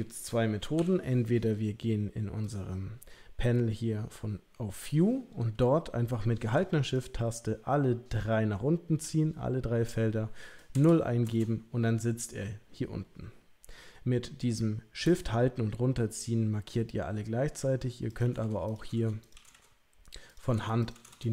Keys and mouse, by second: 0.7 n, 9.0-11.6 drag, 18.2 click, 18.7 click, 19.3 click, 20.4 click, 20.8 click.